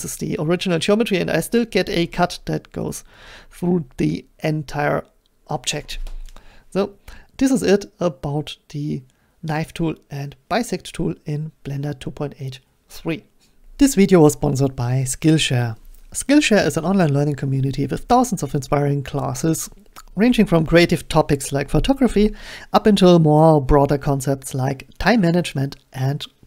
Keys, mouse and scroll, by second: 5.7-10.8 middle drag.